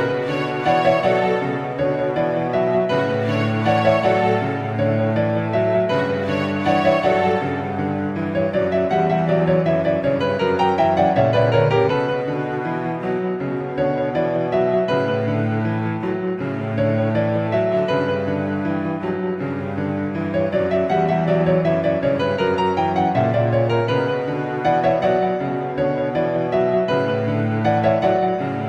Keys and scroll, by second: 24.8 ctrl++.